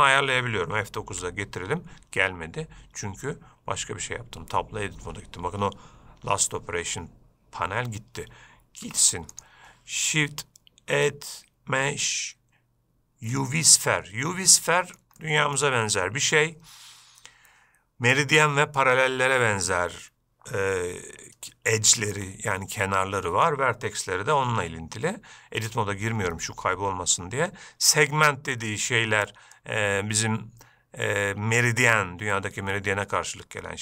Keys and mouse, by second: 1.3 F9, 5.2 Escape, 9.1 x, 11.1 shift+a, 14.1-15.2 middle drag, 15.4-15.8 shift+middle drag, 22.1 shift+middle drag, 22.8-23.7 middle drag, 29.9-33.8 drag.